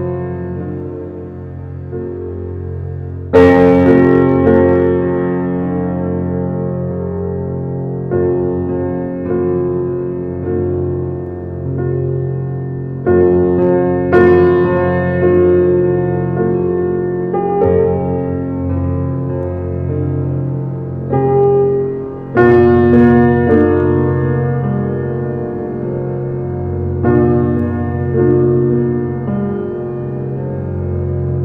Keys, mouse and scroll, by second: 2.0 click, 3.4 shift+a, 4.9 s, 6.5 alt+middle click, 6.8-7.5 shift+middle drag, 7.5 g, 8.6-8.9 shift+middle drag, 8.9 scroll up 3, 9.2 shift+middle click, 9.6 g, 12.2 s, 13.4 alt+middle click, 14.2 scroll up 2, 14.4 shift+middle click, 15.2 g, 16.4 alt+middle click, 17.1 g, 20.6 g, 21.6 alt+scroll up 1, 21.7 alt+middle click, 22.0 alt+middle click, 22.7 scroll down 4, 22.9-24.6 middle drag, 24.6 s, 25.4-25.7 scroll up 2, 25.7-26.1 shift+middle drag, 26.1 Tab, 26.3 click, 27.3 e, 29.1 e.